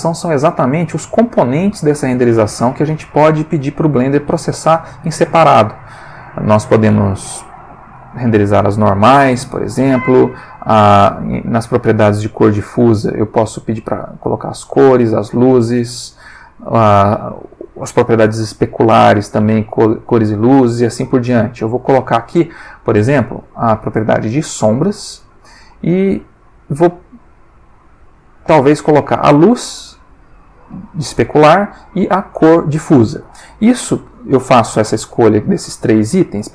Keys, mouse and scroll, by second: 7.1 click, 12.9 click, 15.0 click, 15.8 click, 19.1 click, 21.8 click, 25.7 click, 26.7 click, 28.3 click, 29.1 click, 34.6 middle click.